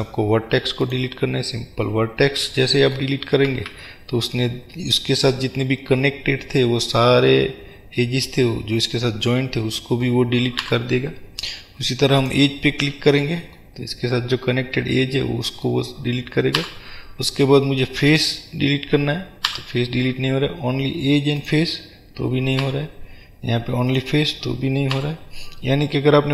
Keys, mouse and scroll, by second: 2.0-16.7 middle drag, 3.9 ctrl+z, 16.7 Delete.